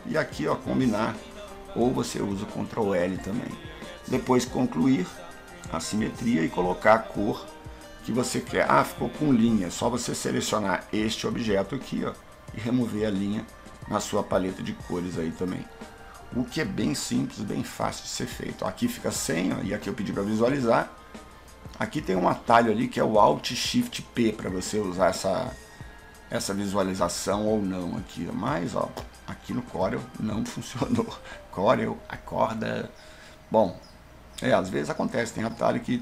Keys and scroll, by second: 0.5 ctrl+l, 23.7 alt+shift+p, 29.8 alt+shift+p.